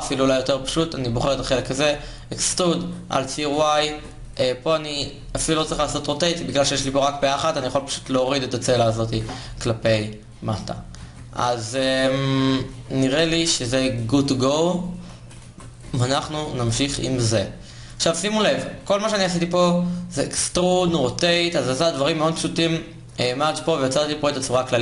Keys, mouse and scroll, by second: 1.1 e, 3.6 ctrl+Tab, 7.5 g, 13.9 ctrl+Tab, 14.8 g, 15.6 Tab, 23.1 a.